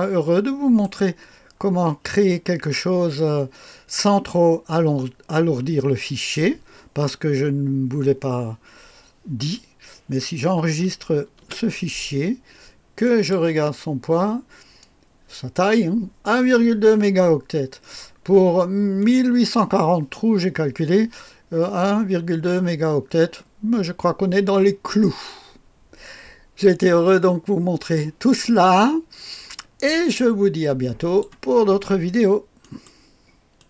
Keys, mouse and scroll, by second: 11.5 ctrl+s, 13.0 click, 13.9 click, 19.0 click, 27.1-31.3 drag, 31.6 click, 32.9 right click, 33.6 click.